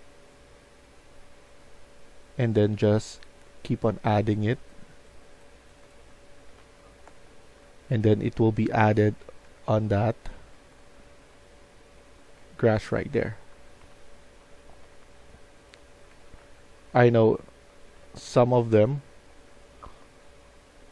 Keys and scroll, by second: 5.7-12.6 typing, 13.9-17.3 typing, 18.7-19.4 typing, 20.7-20.9 typing.